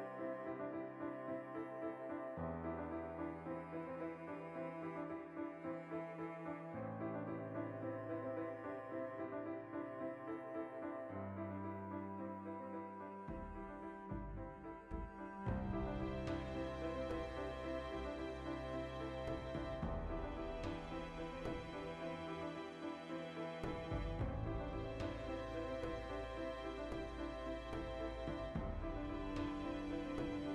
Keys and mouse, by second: 0.1 right click, 0.4 shift+right click, 0.6 f, 1.0-2.9 middle drag, 1.4 ctrl+r, 2.9 right click, 3.2 ctrl+r, 4.3 right click, 4.8 a, 5.0-7.3 ctrl+middle drag, 5.8 alt+s, 7.3 right click, 8.9 a, 9.0-11.2 middle drag, 9.4 alt+h, 10.1 ctrl+i, 10.8 alt+s, 11.2 shift+click, 11.4 alt+e, 11.4-12.8 middle drag, 12.8 click, 12.8-14.6 middle drag, 14.6 click, 15.2-17.8 middle drag, 19.0 shift+click, 19.1 shift+middle click, 20.8 ctrl+r, 21.7 click, 21.9 middle click, 22.4 ctrl+z, 22.9 z, 23.1 middle click, 24.3 ctrl+KP_Add, 25.8 ctrl+i, 26.6 shift+l, 27.6 z, 28.4 3, 28.7 z, 30.0 middle click, 30.4 alt+right click.